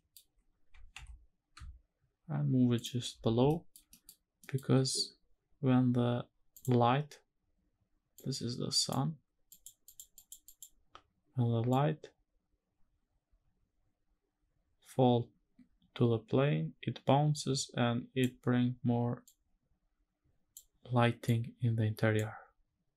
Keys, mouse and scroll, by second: 0.3 g, 0.6 z, 2.5 shift+click, 3.2 shift+middle drag, 3.6 middle click, 4.0 scroll up 1, 4.1 middle click, 6.2 click, 7.8 click, 9.2 click, 9.5 click, 9.8 click, 10.1 click, 11.4-17.9 drag, 18.9-20.2 drag, 20.9 click.